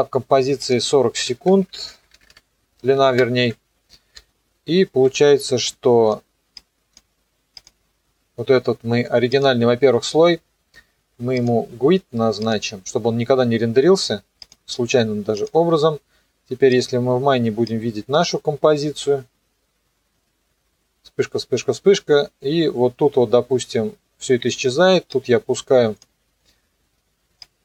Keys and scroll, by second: 1.9 Right, 2.2 Delete, 3.0 KP_4, 3.1 KP_0, 3.4 KP_Enter, 4.2 -.